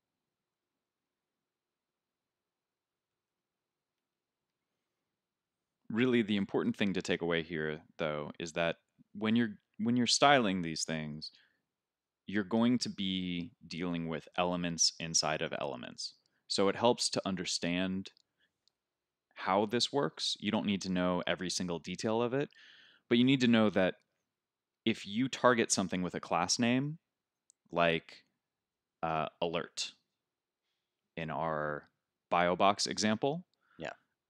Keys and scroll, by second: 0.7 super+z, 2.1 super+z, 3.4 super+z, 4.3 super+s.